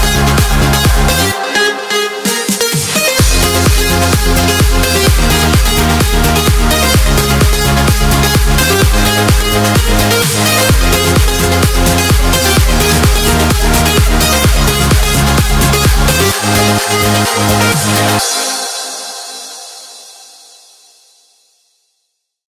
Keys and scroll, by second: 3.5 F1.